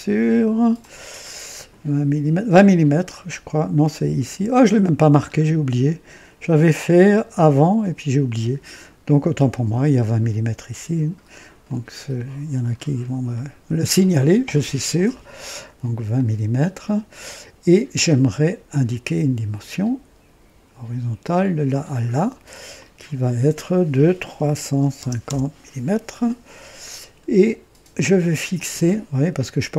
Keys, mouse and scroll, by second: 0.0-1.2 typing, 0.7 click, 5.3 scroll up 2, 11.6 click, 12.6 scroll up 2, 13.3-14.0 right drag, 16.1-17.4 drag, 17.6-18.0 scroll down 1, 19.5 click, 21.2 click, 22.7 click, 24.3 KP_3, 24.6 KP_5, 24.9 KP_0, 25.2 KP_Enter, 26.9 scroll up 1, 28.5-29.7 drag.